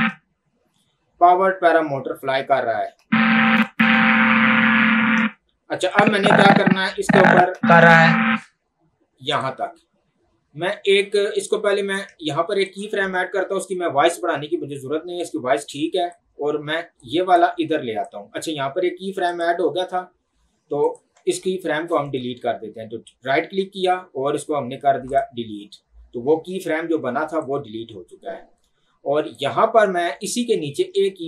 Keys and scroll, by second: 0.0 space, 3.0 space, 5.3 space, 7.5 space.